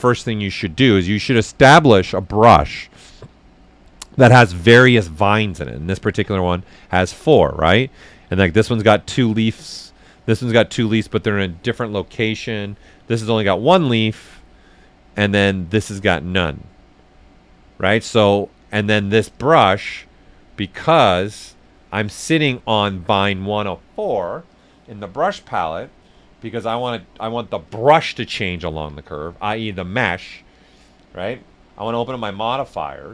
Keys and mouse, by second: 6.9 ctrl+click, 7.9 ctrl+click, 8.7-10.1 ctrl+drag, 10.1 ctrl+click, 11.3 ctrl+click, 12.3-17.3 ctrl+drag, 12.3 typing, 19.3-20.8 ctrl+drag, 19.3 typing, 20.8 ctrl+click, 22.0 ctrl+click, 24.5-29.6 ctrl+drag, 31.6-33.1 ctrl+drag, 31.6 typing, 32.8 typing.